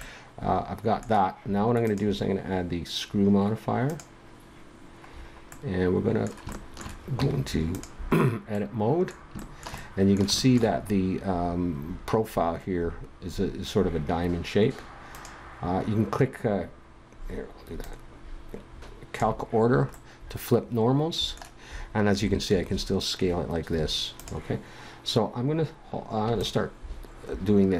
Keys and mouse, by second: 5.2-7.2 middle drag, 7.2 Tab, 8.4 middle click, 10.8-12.7 middle drag, 15.1-18.2 drag, 22.5 s, 26.4-27.7 drag.